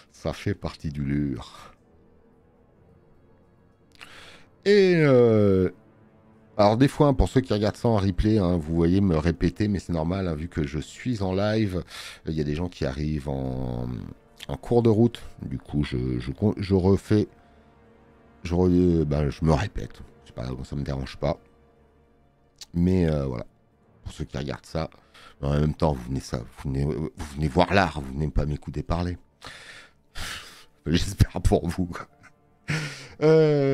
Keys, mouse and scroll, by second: 0.4 space, 0.6 click.